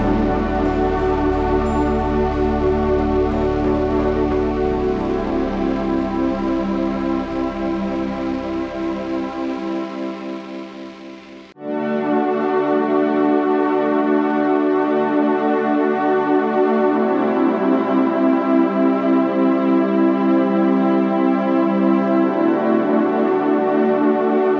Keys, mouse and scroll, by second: 0.7 KP_1, 7.6 Tab, 7.9 z, 12.0 Tab, 20.7 KP_3, 21.6 r.